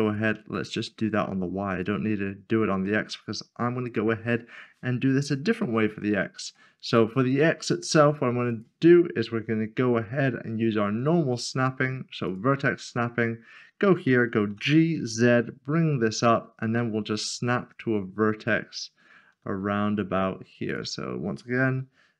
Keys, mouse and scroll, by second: 0.0 ctrl+z, 0.3 s, 1.8 shift+click, 2.8 click, 3.0 middle click, 5.5-5.9 scroll up 1, 6.0 shift+middle click, 8.5 click, 10.9 click, 14.4 click, 14.9 typing, 20.6 click.